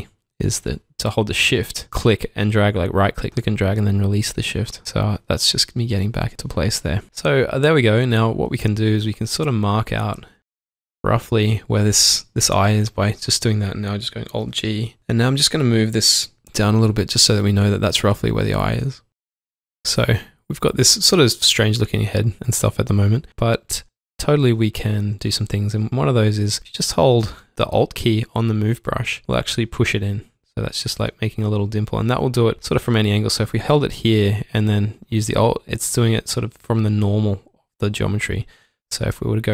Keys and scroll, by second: 1.3 shift+Num_Lock, 8.6 shift+Num_Lock, 10.2 typing, 14.4 alt+g, 17.4 typing, 19.7 typing, 23.0 typing, 25.4-26.2 typing, 27.3-28.0 typing, 29.4 s, 31.8 typing, 32.1 ctrl+z, 36.5 ctrl+z.